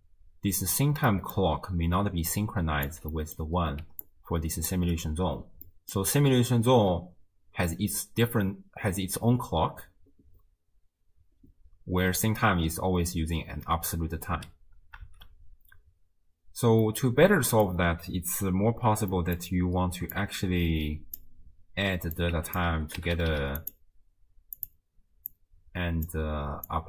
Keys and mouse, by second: 0.6 space, 1.1 click, 2.1-4.9 typing, 2.3 click, 3.1 click, 4.1 click, 5.7 middle click, 15.2 shift+space, 16.9 click, 19.2 click, 20.2-21.2 drag, 22.2-24.7 drag, 23.3 d, 25.3-26.2 drag, 26.7-26.8 drag.